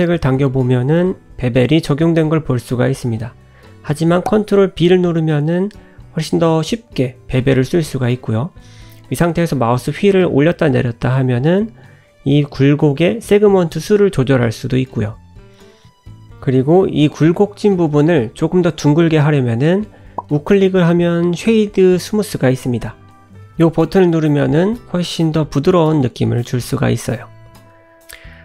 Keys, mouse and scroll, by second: 3.5 ctrl+z, 4.6 ctrl+b, 14.3 click, 15.0 click, 15.4-16.3 scroll up 3, 16.3 Tab, 16.6 scroll down 2, 16.7 middle click, 17.5-18.0 scroll up 2, 18.1 shift+middle click, 18.5 middle click, 18.9-19.6 scroll up 1, 21.0 right click, 23.8 middle click, 25.2 middle click, 26.4-26.8 scroll down 5, 26.8 middle click.